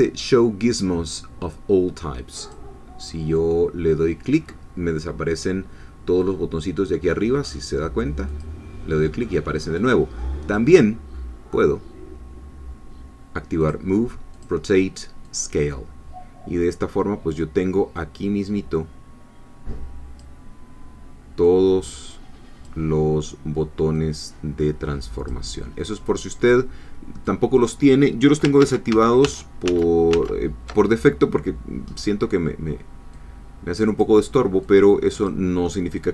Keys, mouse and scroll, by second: 2.4 click, 8.3 click, 10.4 click, 13.6 click, 14.4 click, 15.3 click, 18.0-20.4 drag, 21.5-23.0 drag, 24.0-25.5 drag, 25.9 click, 27.3 click, 28.6 ctrl+z, 31.9-32.2 scroll up 2, 33.2 click, 34.7 click, 36.0 click.